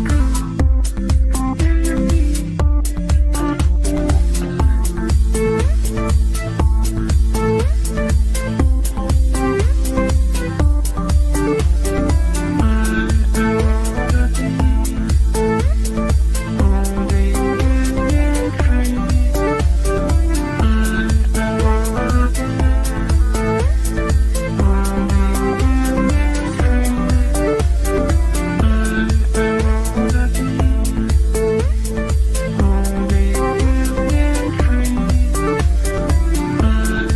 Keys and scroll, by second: 20.8 g.